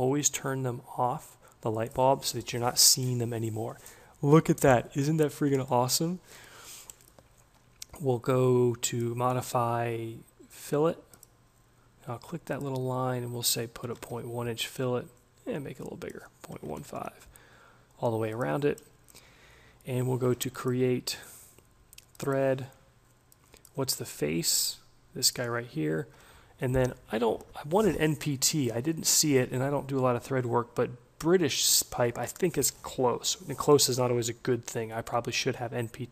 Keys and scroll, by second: 13.9 1, 14.1 Tab, 16.4-17.3 typing.